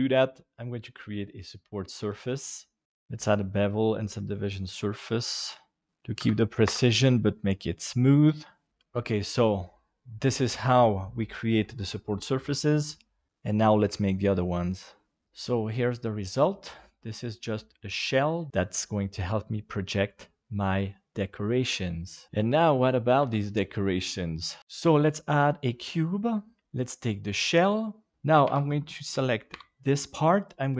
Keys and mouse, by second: 3.2-4.5 drag, 6.0 click, 7.5 middle click, 8.6 middle click, 16.7-22.3 middle drag, 23.2 KP_7, 24.6-25.7 drag, 26.9 right click, 28.1 Tab, 28.4 alt+a, 29.5 l.